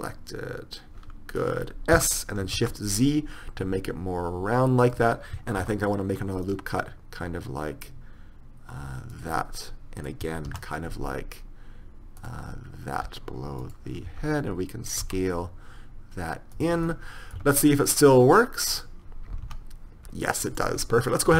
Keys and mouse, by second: 2.1 s, 5.8 ctrl+r, 9.6-11.5 middle drag, 10.7 ctrl+r, 14.2 d, 15.2 s, 17.0 click, 17.5 Tab, 18.9 right click, 19.6 r.